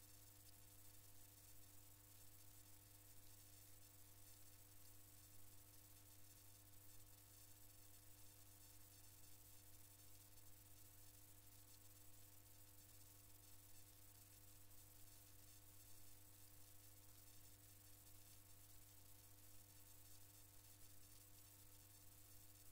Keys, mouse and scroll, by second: 2.3 ctrl+KP_1, 5.9 ctrl+KP_1, 7.1 ctrl+KP_1, 8.3 ctrl+KP_1, 9.6 ctrl+KP_1, 11.3 ctrl+KP_4, 12.6 ctrl+KP_4, 13.9 ctrl+KP_4, 15.2 ctrl+KP_4, 16.6 ctrl+KP_4, 19.1 click.